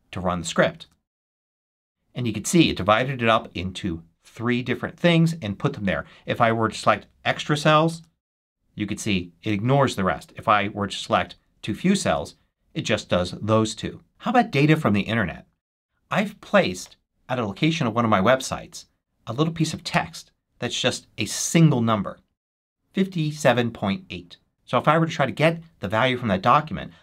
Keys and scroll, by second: 0.7 shift+super+1, 7.8 shift+super+1, 11.9 shift+super+1, 16.7 super+v, 19.8 Return.